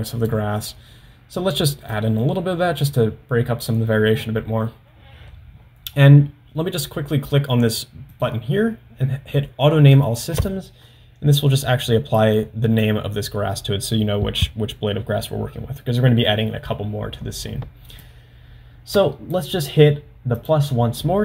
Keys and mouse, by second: 2.0-3.1 drag, 8.2-10.6 drag, 12.2 click, 18.0-19.4 drag, 20.4 click.